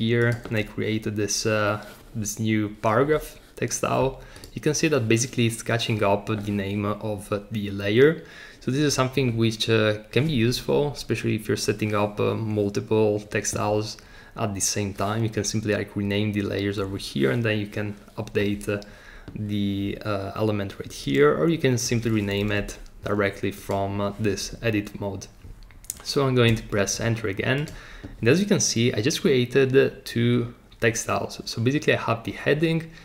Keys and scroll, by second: 22.6 BackSpace, 26.5 Return.